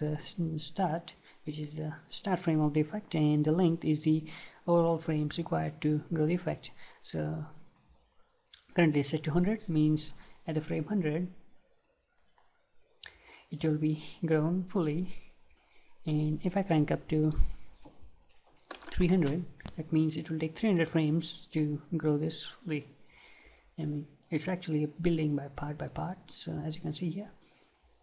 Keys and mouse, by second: 11.0-12.8 right drag, 17.3-19.2 drag, 26.0-27.7 right drag.